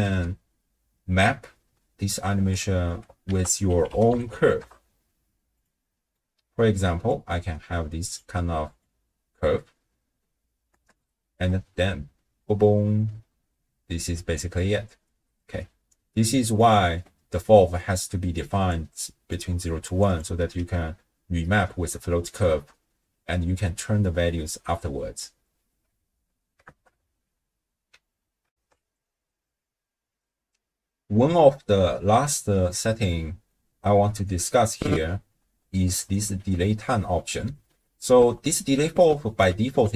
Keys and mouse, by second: 2.4 space, 3.3 ctrl+a, 5.9 click, 7.1-8.3 drag, 10.7 shift+space, 11.3 space, 15.1 space, 16.4 click, 18.4-20.4 d, 18.7 click, 19.9 click, 20.1 click, 20.6 d, 26.7 shift+space, 28.5 ctrl+alt+shift+w, 28.7 ctrl+alt+shift+q, 32.6-33.6 drag, 32.6-33.6 right drag, 33.8 d, 34.2-36.2 right drag, 36.2 d, 36.2 d, 38.1 click, 38.1 right click, 38.1 d.